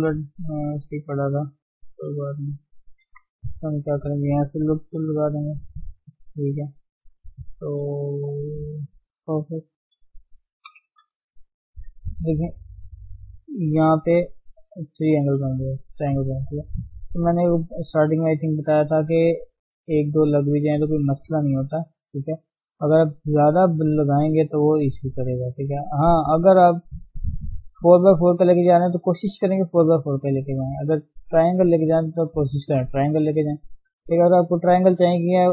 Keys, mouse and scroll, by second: 0.0 g, 2.2 middle click, 2.9-3.4 scroll down 2, 3.4-5.0 shift+middle drag, 5.0 k, 10.6 KP_1, 12.3 click, 13.2 g, 15.9-16.2 scroll up 2, 16.2-18.0 shift+middle drag, 18.0 3, 19.1 click, 19.6-24.4 shift+middle drag, 24.4-25.2 scroll down 5, 25.2 a, 25.6-25.9 scroll down 2, 25.9 shift+middle click, 26.1-26.7 scroll up 3, 26.7 click, 27.7 click, 28.6 click, 29.9 scroll up 1, 31.2 shift+middle click, 31.4-31.9 scroll up 1, 31.9 click, 33.3-34.0 scroll down 5, 34.0 a, 34.3-34.6 scroll down 2, 34.6 shift+middle click, 34.9-35.5 scroll up 1.